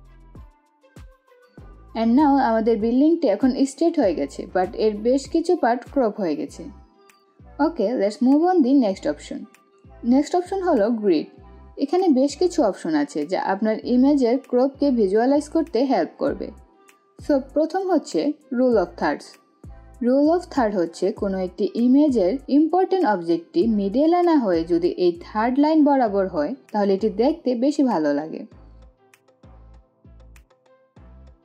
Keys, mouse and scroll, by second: 8.2 click, 11.8 right click, 21.6-30.1 drag, 30.1 click.